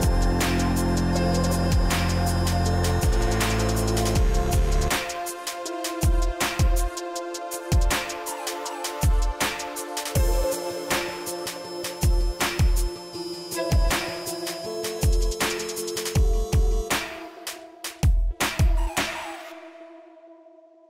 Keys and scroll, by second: 5.0 Right.